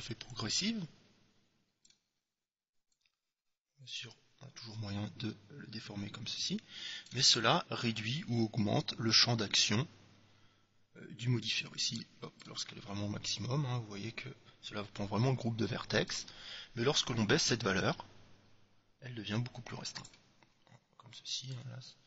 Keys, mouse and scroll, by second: 3.1-4.9 drag, 9.2-11.0 drag, 13.6-15.3 drag, 17.1-18.9 drag, 21.7-22.0 drag.